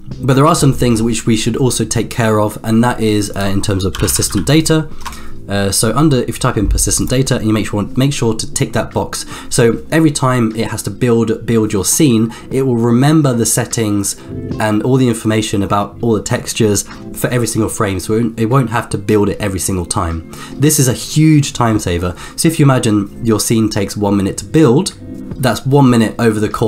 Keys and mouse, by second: 3.4-7.0 drag.